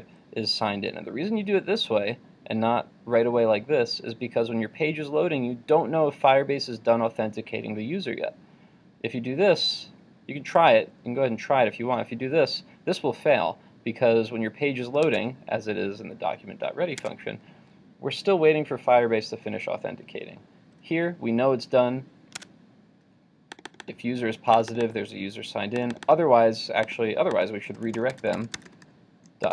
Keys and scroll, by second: 15.1 super+Tab, 22.4 super+Tab.